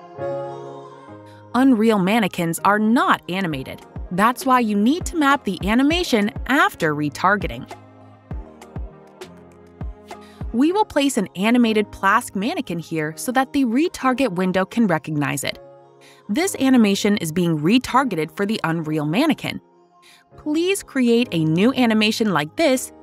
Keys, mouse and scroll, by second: 0.1 click, 3.4 click, 5.5 click, 8.4 click, 13.4 click, 15.8 click, 18.0 right click, 19.1 click, 21.4 click.